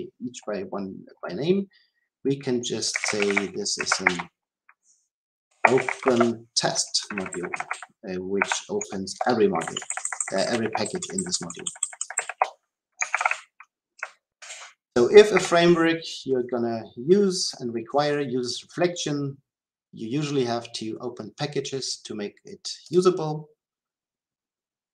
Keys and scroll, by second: 7.5 Delete, 13.0 ctrl+x, 14.3 ctrl+x, 22.8 shift+F10.